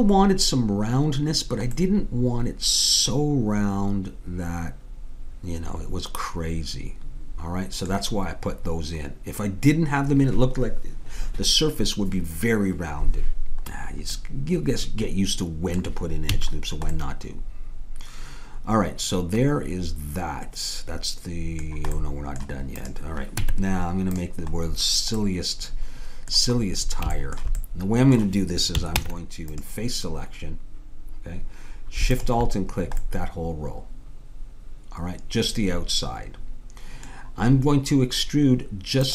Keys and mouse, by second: 1.4-2.9 middle drag, 14.2-16.4 middle drag, 16.4 a, 17.0 middle click, 22.0 middle click, 22.8-24.6 drag, 23.4 Tab, 29.0 ctrl+Tab, 32.2-33.9 drag, 34.1 middle click.